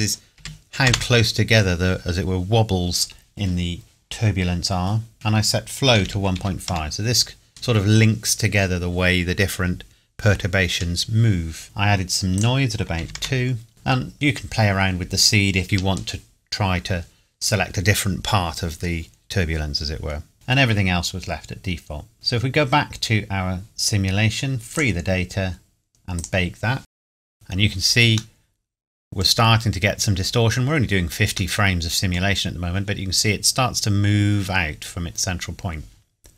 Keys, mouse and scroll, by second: 0.4 KP_2, 0.9 KP_Enter, 5.1 click, 5.9 KP_1, 6.1 KP_Decimal, 6.4 KP_5, 6.7 KP_Enter, 12.4 click, 13.0 KP_2, 13.2 KP_Enter, 22.1 click, 24.7 click, 27.3 click, 28.4 middle click, 29.5 scroll up 1, 30.7 scroll down 1, 31.6 middle click.